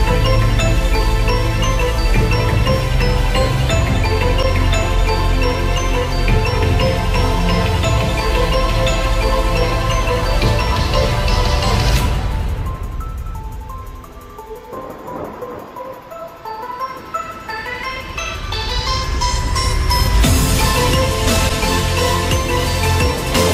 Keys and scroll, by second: 1.1 ctrl+t, 3.8 Return, 6.6 Left, 10.3 Up, 12.0 Left.